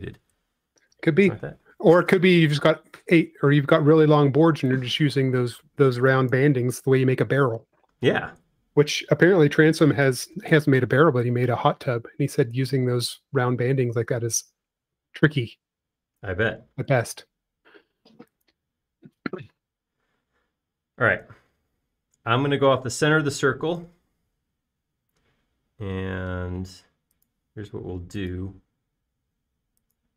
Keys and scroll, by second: 11.6 Return, 12.1 Return, 25.1 p, 26.7-27.4 typing.